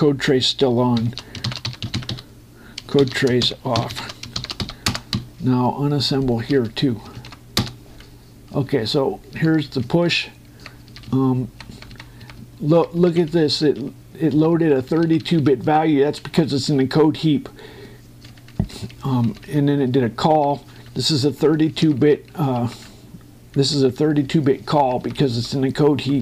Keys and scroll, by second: 3.7 shift+9, 4.1 shift+', 5.1 shift+w, 5.6 Return, 5.9 Up, 7.9 ctrl+Right, 8.4 Return, 9.2 Up, 10.6 Right, 14.0 Left, 15.1 Right, 16.7 Left, 21.5 Left, 22.5 Right, 23.6 Left, 25.4 Right.